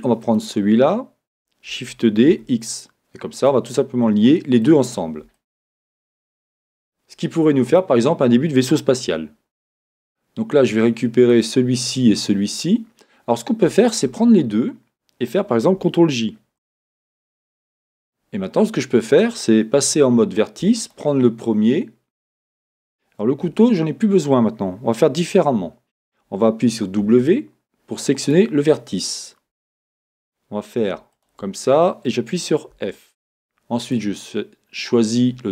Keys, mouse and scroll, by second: 0.2-1.7 drag, 2.4 shift+d, 3.5 click, 4.3-6.2 shift+middle drag, 4.9-5.4 scroll, 6.2-7.5 scroll, 7.5 scroll up 2, 7.7 click, 11.3 click, 13.9 shift+click, 16.6 ctrl+j, 17.6 Tab, 20.8 click, 20.8 1, 22.7-28.3 drag, 23.5 Escape, 27.0 w, 31.1 shift+click, 32.7 f, 33.8 click.